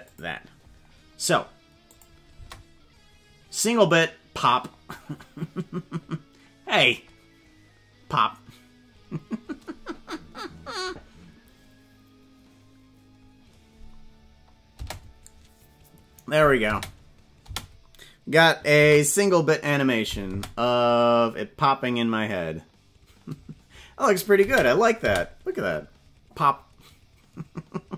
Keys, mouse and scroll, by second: 1.8 click, 2.3 space, 14.7 space, 16.6 space, 17.5 space, 18.8 ctrl+s, 20.2 space, 24.4 space, 25.1 space.